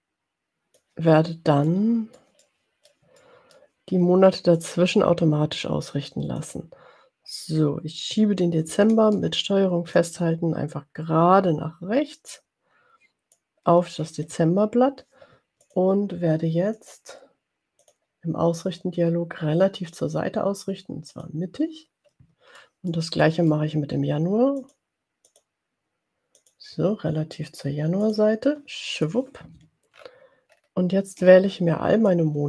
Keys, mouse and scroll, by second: 1.7-3.8 middle drag, 4.7 click, 6.7 click, 10.0-13.9 ctrl+drag, 15.9 click, 17.0 click, 18.1 click, 21.4 click, 22.6-23.7 middle drag, 24.6 click, 25.4 click, 26.5 click, 28.0 click, 29.0 click, 30.0-30.4 ctrl+scroll down 2, 30.6 ctrl+scroll down 2, 32.0-32.4 drag.